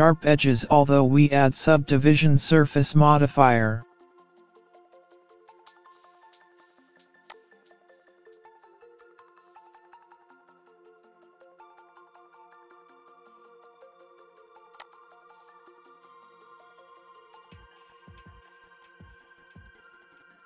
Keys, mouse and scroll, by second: 0.0-0.6 scroll down 3, 0.5-1.7 scroll up 2, 1.8 click, 7.4 click, 10.3-10.7 scroll down 3, 10.5-11.0 scroll up 3, 11.1 middle click, 14.8 click, 17.2-17.5 scroll up 1, 17.5 middle click, 18.4-18.8 scroll down 5, 18.6 scroll up 2, 18.8 middle click.